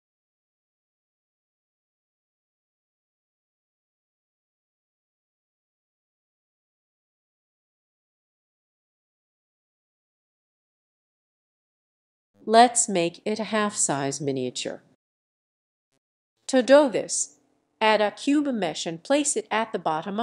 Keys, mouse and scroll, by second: 1.0 ctrl+click, 1.3 ctrl+click, 3.9 click, 5.9 ctrl+z, 6.1-6.8 scroll, 7.6 click, 7.9 click, 8.8-9.1 scroll, 9.1 scroll down 1, 10.3 click, 10.8 click, 13.3 click, 15.9-16.7 scroll down 1, 16.7-17.0 scroll down 1, 17.0 s, 18.3 click, 18.7 g, 19.9 click.